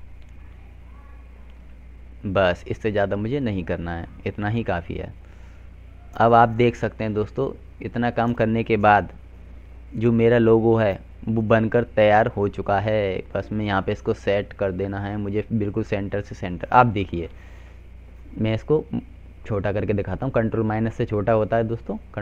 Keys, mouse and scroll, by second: 10.7 Down, 12.6 Right, 13.0 Down, 13.6 Up, 15.2 F4, 16.7 click, 18.6 F3, 19.6 click, 21.4 right click.